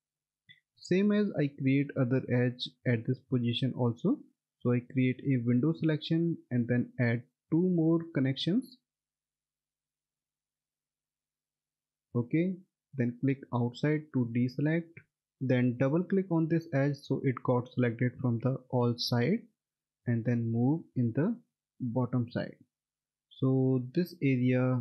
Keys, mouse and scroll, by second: 4.5 click, 6.4 right click, 8.1 click, 10.6 2, 11.5 click, 16.0 click, 16.3 double click, 18.5 alt+middle click, 20.4-21.7 scroll up 1, 21.7 middle click, 21.8 click.